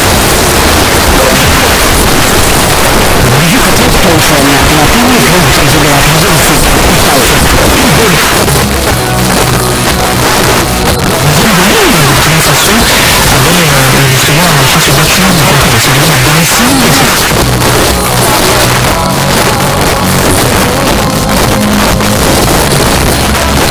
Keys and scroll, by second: 8.2 Page_Down, 17.1 Page_Down.